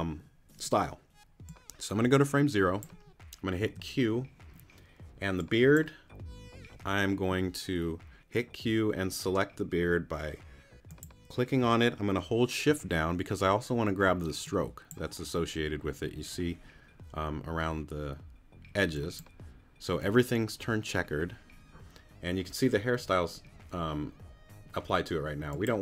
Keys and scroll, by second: 3.6 q.